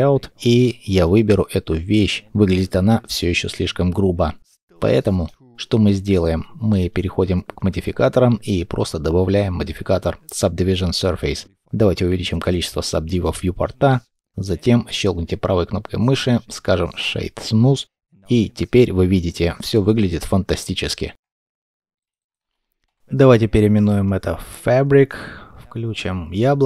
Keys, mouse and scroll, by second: 2.3-2.9 scroll up 1, 2.9 middle click, 3.8 shift+middle click, 4.8-6.2 scroll up 1, 13.4 middle click, 14.8 right click, 17.1 middle click, 22.1 double click, 22.3 typing, 22.8 Return, 24.6 scroll down 1, 24.8-25.1 scroll up 1.